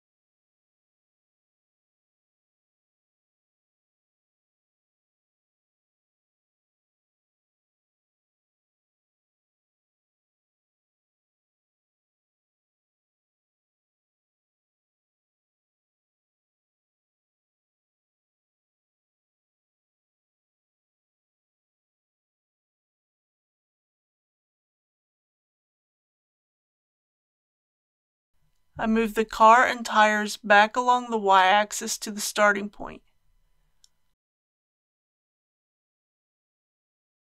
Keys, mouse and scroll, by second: 0.4 KP_0, 1.0 scroll down 1, 3.4-5.3 shift+middle drag, 5.7-10.8 drag, 20.5 KP_5, 20.7 KP_0, 22.2 click, 25.2 click, 25.5 scroll down 1, 26.5-27.2 scroll down 1, 27.7 click, 30.4 shift+click, 31.2 shift+click, 33.5 g, 33.7 y, 37.2 click.